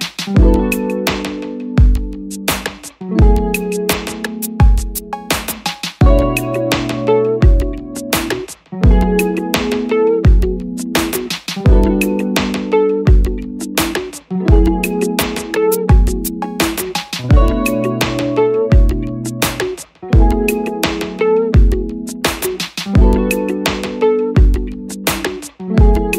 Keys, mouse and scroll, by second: 0.7 Return.